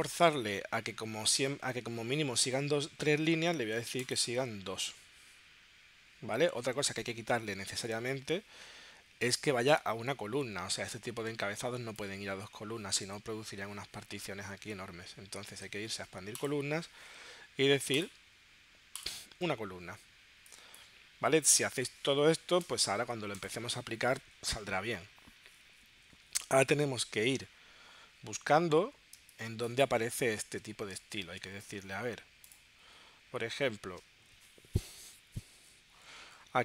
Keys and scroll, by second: 7.5 super+Tab, 14.8 super+Tab, 29.2 space.